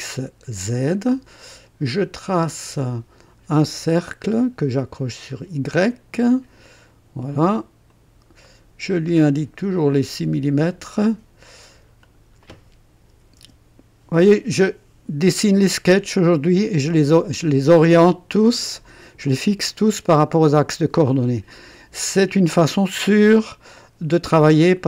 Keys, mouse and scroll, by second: 2.6 click, 3.6 scroll up 1, 5.8 click, 7.8 click, 8.4 right click, 9.7 click, 10.9 click, 12.0 click, 13.1 KP_6, 13.4 KP_Enter.